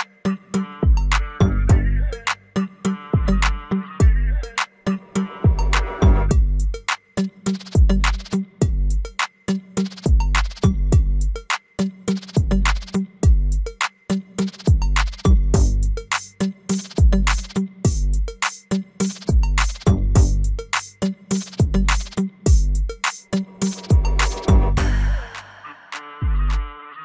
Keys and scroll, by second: 3.9 alt+w, 5.9 F3.